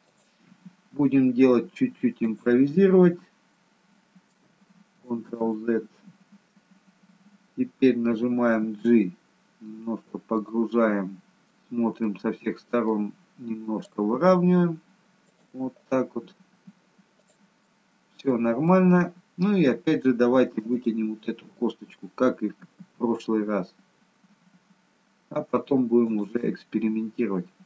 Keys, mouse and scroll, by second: 0.0 click, 0.5 e, 3.0-3.6 scroll up 2, 5.2 ctrl+z, 9.2 g, 10.7 middle click, 11.6 scroll down 2, 12.0 middle click, 13.7 click, 14.2 g, 15.8 click, 16.5 g, 17.6 middle click, 18.7 middle click, 20.8 click, 22.6 e, 27.3-27.6 scroll down 2.